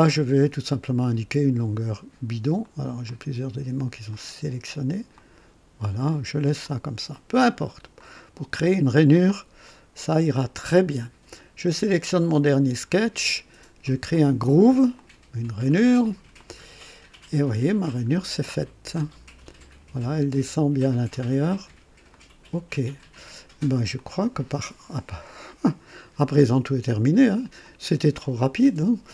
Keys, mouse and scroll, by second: 1.0 click, 2.6 click, 3.1 click, 4.1 click, 5.2 click, 6.6 click, 7.9 click, 9.1-10.9 drag, 14.9 click, 16.4-21.3 drag, 22.1 click, 23.2 scroll down 1, 24.0-27.4 drag, 27.6-28.3 drag.